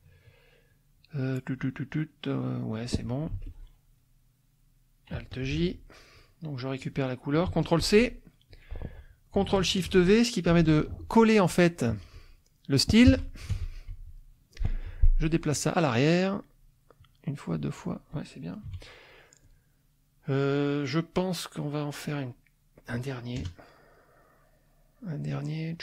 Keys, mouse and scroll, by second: 0.6 click, 1.7 click, 2.5 click, 2.9 middle click, 3.0 click, 3.3 F2, 3.4 click, 5.4 alt+j, 5.9 alt+click, 6.8 click, 7.8 ctrl+c, 8.5 click, 10.5 ctrl+shift+v, 11.9 click, 13.1 F1, 13.9 Escape, 14.8 F1, 17.0 click, 17.5 click, 18.7 -, 19.2 middle click, 20.1 middle click, 20.8 click, 21.7 click, 22.3 click, 23.4 KP_Add, 24.0 click, 25.3 click.